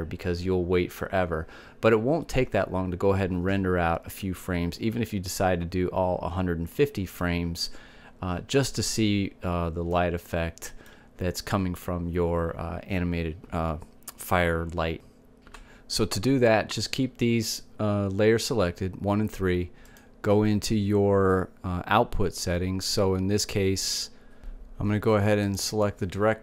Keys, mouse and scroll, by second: 10.7-12.6 middle drag, 20.6-22.5 drag.